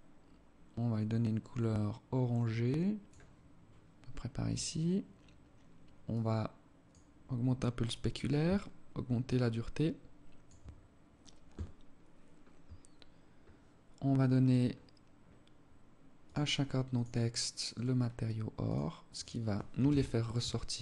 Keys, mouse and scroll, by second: 4.0 scroll down 3, 5.5 click, 7.9 shift+click, 11.1 scroll down 2, 11.4 scroll up 1, 11.9-12.7 scroll down 1, 12.7-13.3 scroll up 10, 13.9 right click, 15.6 click, 17.1 right click, 18.0 click, 19.2 KP_0, 20.7 KP_0.